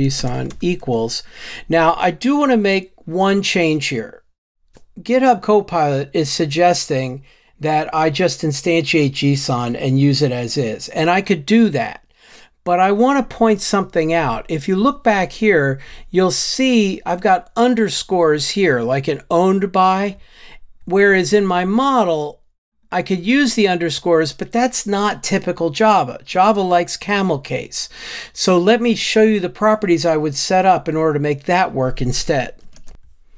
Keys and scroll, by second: 32.9 super+BackSpace.